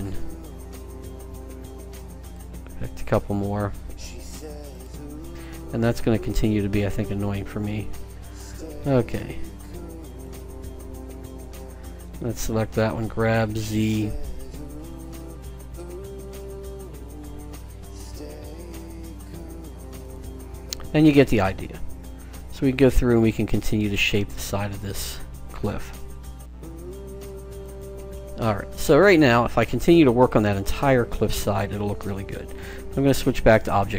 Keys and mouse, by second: 11.5-13.2 right drag, 13.2 g, 16.4-18.1 drag, 17.1-18.2 right drag, 17.9 g, 21.2-22.7 drag, 22.1 g, 24.6-25.6 drag, 25.6 right click, 25.8 g, 28.3 middle click, 29.6-31.1 middle drag, 32.7-33.9 drag.